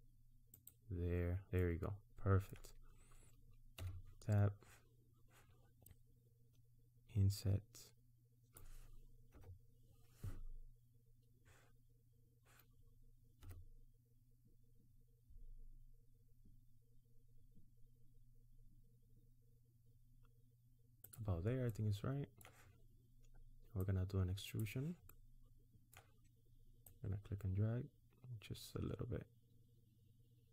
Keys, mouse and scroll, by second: 1.6 middle click, 3.8 Tab, 5.8 click, 9.3 KP_1, 13.4 s, 21.6 middle click, 23.9 click, 25.1 middle click, 26.9 click.